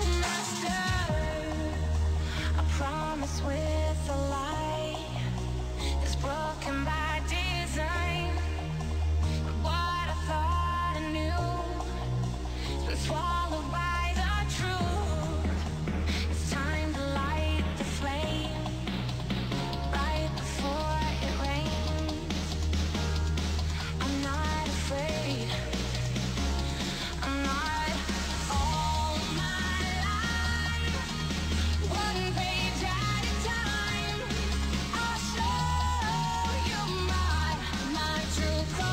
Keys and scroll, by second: 7.0 ctrl+s, 26.6 2, 29.3 ctrl+s, 37.3 ctrl+space.